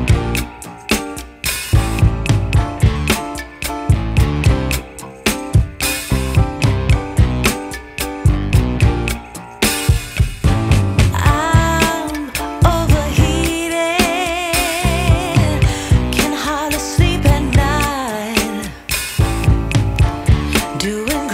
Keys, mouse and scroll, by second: 13.4 3, 13.6 5, 13.8 Return.